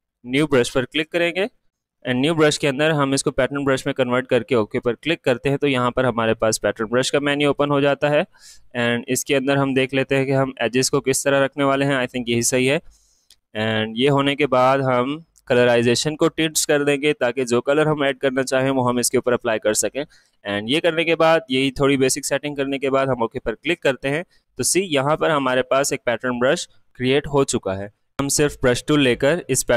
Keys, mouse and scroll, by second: 4.0 click, 7.4 click, 7.5 click, 11.1 click, 14.9 click, 23.2 click, 23.3 click, 27.8 click.